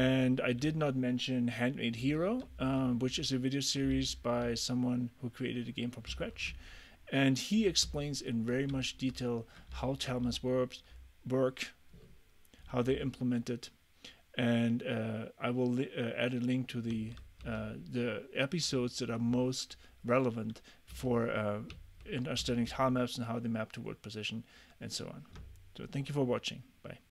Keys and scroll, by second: 0.0 d, 2.1-4.5 typing, 6.2 a, 8.6 d, 9.8 w, 10.3 d, 12.7 d, 17.0 w, 17.5 a, 21.0 a.